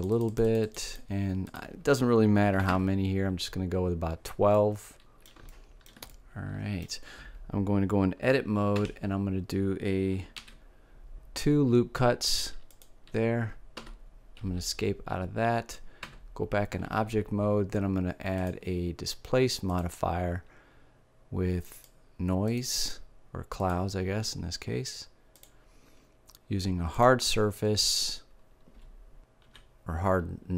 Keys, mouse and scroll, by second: 4.5 middle click, 8.7 Tab, 10.3 ctrl+r, 16.0 Tab, 18.3-20.1 drag, 21.7-25.3 drag, 26.9-28.6 drag.